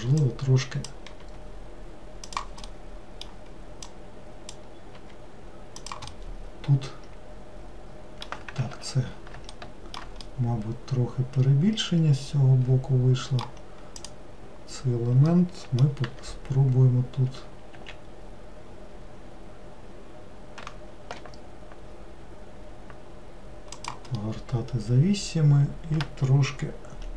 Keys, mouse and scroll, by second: 0.3 click, 1.3 g, 2.8-3.9 middle drag, 3.9 click, 5.1 g, 6.2-8.8 middle drag, 8.8 ctrl+z, 9.6 alt+middle click, 10.3-13.3 middle drag, 14.0 click, 15.4 middle click, 16.1 r, 24.3-27.1 middle drag.